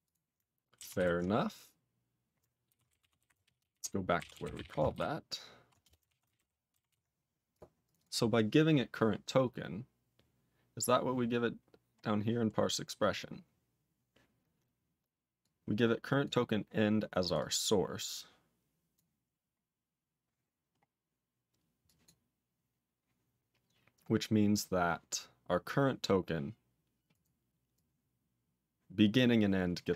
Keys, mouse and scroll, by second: 0.0 click, 0.9 ctrl+s, 2.6-5.1 typing, 5.8 Return, 6.1 ctrl+a, 6.2 ctrl+space, 6.3 ctrl+g, 6.8 ctrl+s, 7.5 click, 7.8 click, 7.9 double click, 9.5-10.7 scroll down 9, 11.5-14.1 scroll down 12, 15.4 click, 16.2 click, 17.2 click, 17.3 double click, 18.1 click, 18.9 click, 19.1-19.9 scroll up 7, 19.9-20.5 scroll up 1, 20.5-21.3 scroll up 5, 21.8 click, 22.0 click, 27.1 click, 27.7 click, 29.1 click.